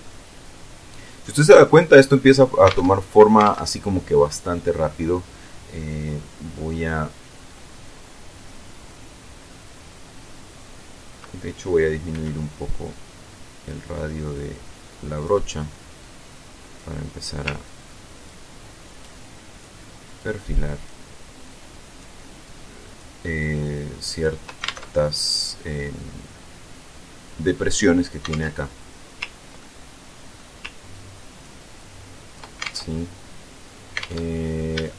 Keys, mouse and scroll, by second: 1.1-2.0 scroll up 1, 2.0 scroll down 2, 2.3 alt+Tab, 3.0 alt+Tab, 3.3-3.8 alt+scroll down 1, 3.8 click, 6.8-7.3 scroll up 1, 11.7 f, 14.6 click, 15.5-16.5 drag, 17.2 ctrl+click, 18.4 ctrl+click, 19.7 ctrl+click, 21.0 ctrl+click, 22.0 ctrl+click, 23.1 ctrl+click, 24.2 ctrl+alt+Tab, 27.8 alt+Tab, 29.1 ctrl+middle click, 30.5 ctrl+click, 32.0 ctrl+click, 32.1 ctrl+alt+Tab, 33.5 alt+Tab, 34.4 shift+middle click.